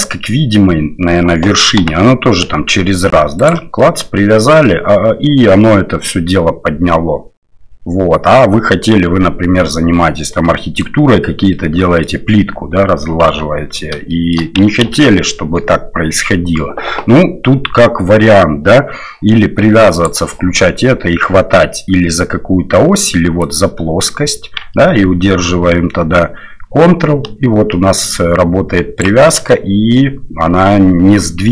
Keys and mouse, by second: 1.8 g, 3.8 middle click, 10.4 middle click, 11.5 middle click, 13.2 KP_7, 14.1 shift+middle click, 14.8 ctrl+z, 19.9 click, 23.4-29.0 drag, 29.5 middle click, 31.4 middle click.